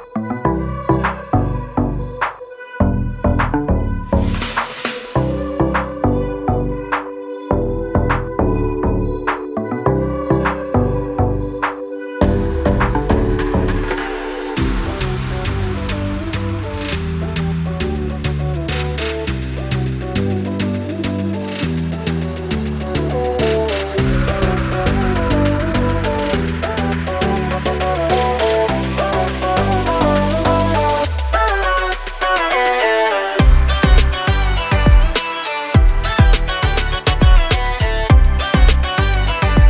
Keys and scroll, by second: 1.1-2.1 typing, 8.1 l, 10.0 space, 10.3 p, 11.4 space, 12.2 Delete, 15.6 m, 16.9 space, 17.8 m, 19.5 2, 19.8 Return, 20.0 space, 20.5 p, 21.3 2, 21.6 Return, 22.8 2, 23.1 Return, 25.4 2, 25.6 Return, 26.6 2, 26.9 Return, 27.1 space, 35.4 l, 37.9 space, 38.5 p, 39.4 space.